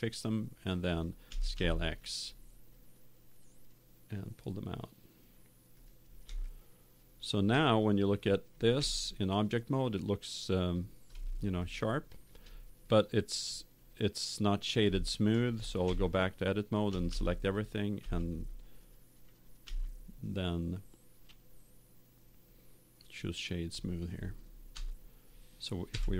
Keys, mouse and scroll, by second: 1.2 s, 5.8 click, 6.4-9.6 middle drag, 8.7 Tab, 10.1 middle click, 10.7 middle click, 12.8 middle click, 13.9 middle click, 15.0 middle click, 15.8 Tab, 16.8 a, 17.1 a, 17.9 w, 19.6 w, 24.7 Tab.